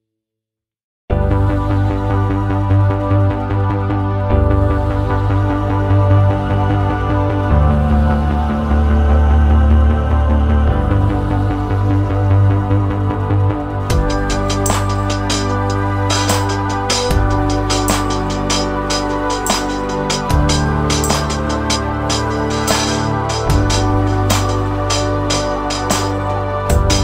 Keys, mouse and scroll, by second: 1.7 click, 4.1 click, 10.2 click, 10.2 scroll up 1, 10.8-12.2 scroll up 14, 12.2-12.7 scroll up 1, 13.6 middle click, 17.8 click, 21.9-25.6 scroll down 11, 25.6 middle click, 25.6-27.0 scroll down 1.